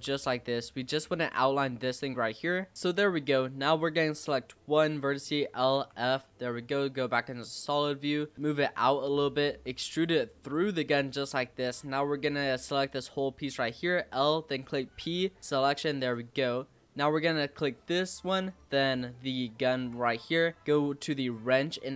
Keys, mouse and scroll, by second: 2.3 click, 2.7 e, 2.7-3.7 scroll down 3, 3.7 click, 4.9 l, 5.7 f, 6.2 z, 7.9 middle click, 8.3 click, 8.9 scroll down 2, 9.1 middle click, 9.6 e, 10.7 middle click, 11.3 scroll up 2, 12.2 click, 13.5 l, 14.8 p, 15.6 Tab, 15.9 click, 16.2 scroll down 4, 16.3-17.2 middle drag, 17.2 click, 19.2 shift+click, 21.1 click.